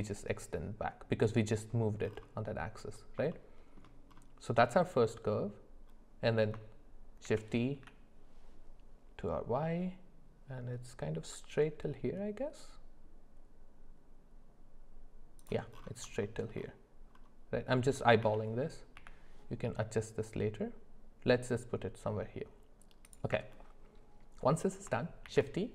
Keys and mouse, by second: 3.3 shift+middle click, 7.3 shift+d, 16.2 shift+middle click, 18.2 g, 25.3 shift+d.